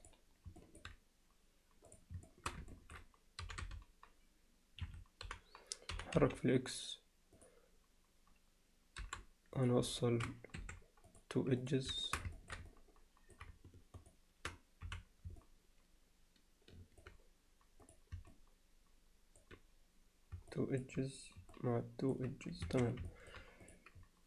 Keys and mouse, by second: 0.0 click, 0.6 alt+middle click, 1.9 click, 2.3 alt+shift+middle click, 2.7 ctrl+alt+middle click, 3.4 g, 5.9 g, 9.0 o, 9.6 click, 10.0 alt+shift+middle click, 10.6 2, 11.1 click, 12.0 alt+shift+middle click, 12.4 ctrl+alt+middle click, 12.7 alt+middle click, 14.0 shift+click, 15.4-17.0 middle drag, 17.9 click, 18.3-19.4 alt+middle drag, 20.5 alt+middle click, 21.6 middle click, 23.1 alt+middle click, 23.6 click.